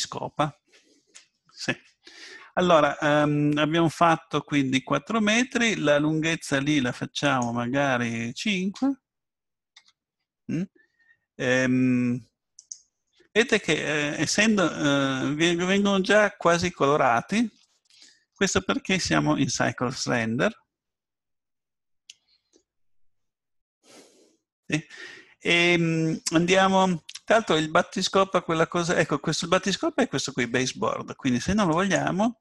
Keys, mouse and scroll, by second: 7.3-9.3 drag, 13.0-13.8 scroll up 1, 13.8-15.7 middle drag, 17.7-19.9 middle drag, 31.7-32.4 drag.